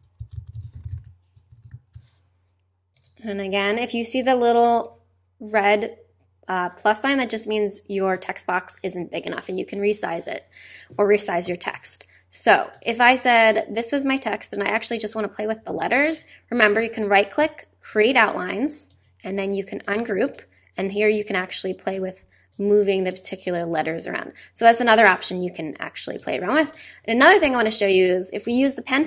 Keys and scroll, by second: 0.0-1.4 typing, 1.5 super+e, 1.7 super+a.